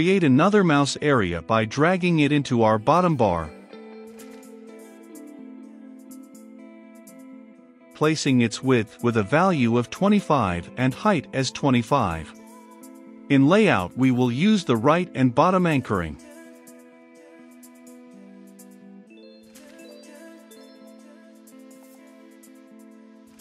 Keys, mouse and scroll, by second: 3.6-22.6 drag.